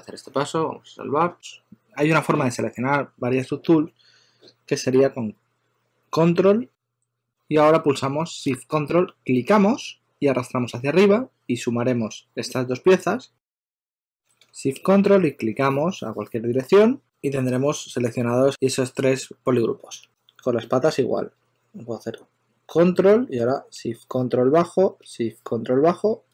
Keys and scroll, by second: 0.7-1.8 typing, 4.1-4.8 typing, 11.8 shift+super+d, 12.4 shift+super+d, 13.3 shift+super+x, 18.3 super+z.